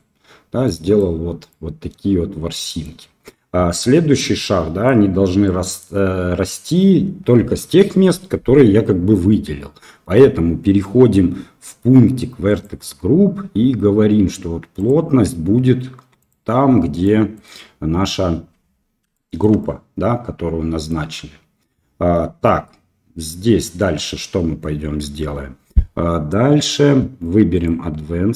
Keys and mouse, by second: 0.6-0.9 middle drag, 1.5-2.8 middle drag, 4.1 middle click, 5.4 middle click, 12.4 click, 14.7-16.3 drag, 17.0-17.3 middle drag, 19.1-19.4 shift+middle drag, 19.6-20.9 middle drag, 23.6-24.2 middle drag, 27.5 click.